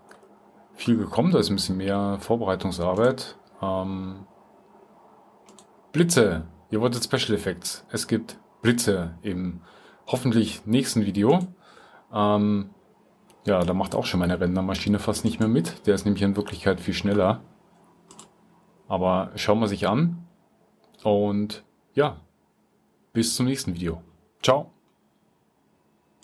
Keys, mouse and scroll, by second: 5.7 middle click, 5.9 click, 13.6 click, 17.1 click.